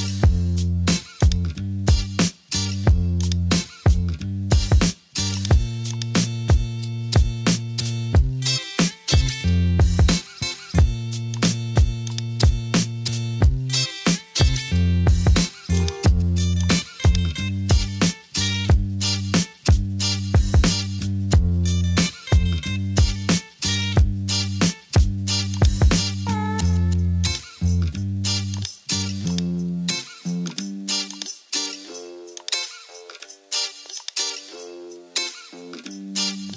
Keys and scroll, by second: 8.4 super+j, 14.7 super+t, 20.6 Return, 35.3 Caps_Lock.